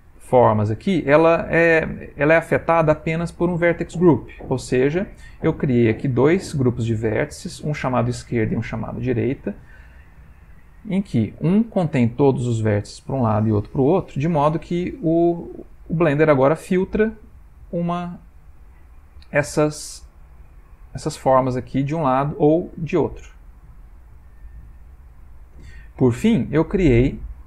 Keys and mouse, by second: 0.3 click, 4.7 middle click, 8.9 middle click, 9.5 middle click, 9.8 Tab, 10.3 middle click, 10.9 shift+middle click, 11.0 shift+middle click, 11.4 middle click, 13.9 middle click, 14.9 Tab, 16.6 click, 19.5 click, 21.8 click, 25.0 click, 26.6 middle click.